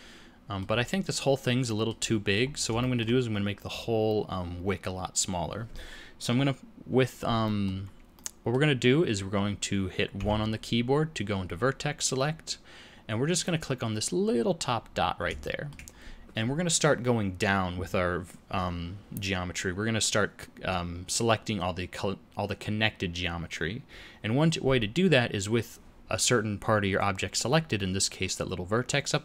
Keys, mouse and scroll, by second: 0.7-1.6 scroll down 1, 1.6 middle click, 1.6-2.2 scroll down 3, 2.4-2.9 scroll up 4, 2.7 shift+middle click, 3.7 scroll up 2, 7.4 scroll up 1, 7.5 middle click, 8.1 middle click, 10.1 1, 13.3 click, 14.8-15.2 scroll down 1, 15.4 shift+middle click.